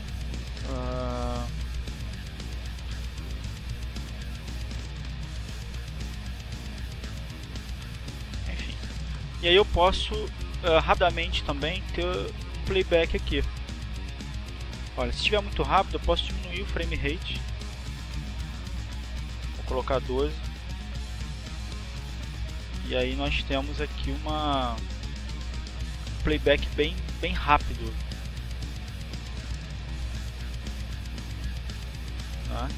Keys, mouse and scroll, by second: 0.1-1.7 drag, 2.1-3.2 drag, 3.8 click, 8.7-9.9 drag, 10.3 click, 11.0-12.4 drag, 17.1 click, 18.3 click, 19.6 click, 21.2-22.3 drag, 23.0 click, 23.7 click, 24.2-24.9 scroll down 4, 25.4 scroll down 2, 26.9 click, 28.3 click, 29.6 click, 30.8 click, 32.1 click.